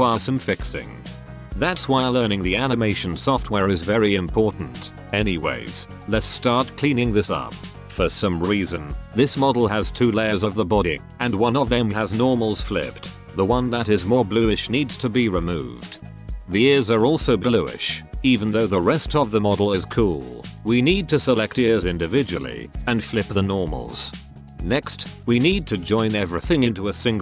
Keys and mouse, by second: 7.8 Tab, 8.6 a, 9.2 l, 9.8 g, 11.6 x, 13.2 Tab, 15.2 middle click, 15.4 ctrl+KP_1, 16.0 KP_1, 17.2-18.8 middle drag, 18.1 Tab, 18.1-20.2 right drag, 20.2 middle click, 20.6 right click, 20.6 l, 20.8 space, 22.4 middle click, 23.0 right click, 23.0 l, 23.3 space, 23.8 ctrl+KP_1, 25.2 Tab.